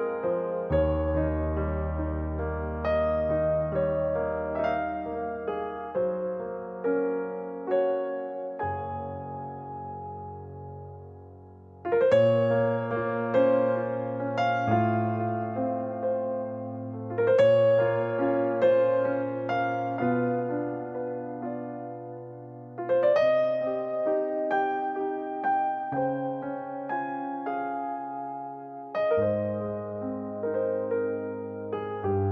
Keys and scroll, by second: 12.1 typing, 14.2 typing.